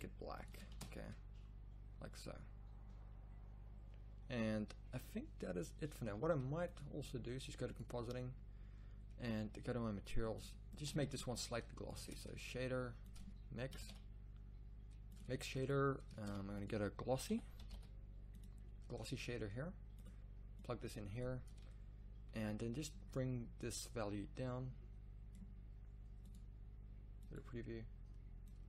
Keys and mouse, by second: 0.9 shift+z, 6.2 z, 6.5 z, 8.0-8.7 middle drag, 8.1 click, 9.0-9.6 middle drag.